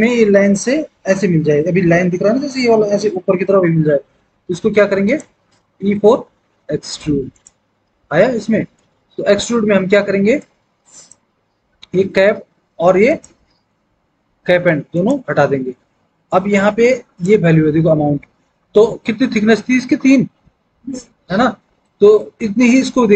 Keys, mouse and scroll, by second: 5.8 e.